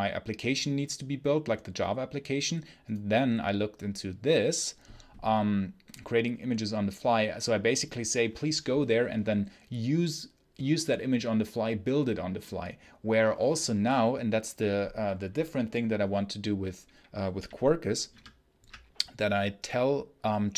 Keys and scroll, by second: 18.0 super+3.